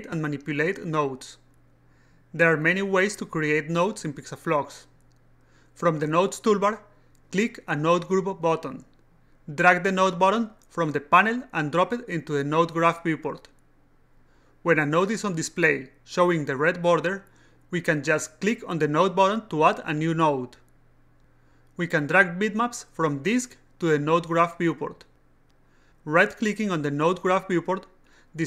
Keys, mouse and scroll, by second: 8.3 click, 12.2-13.8 drag, 19.2 click, 20.6 click, 21.7-22.9 drag, 23.5-25.1 drag, 25.6 click, 27.0 right click.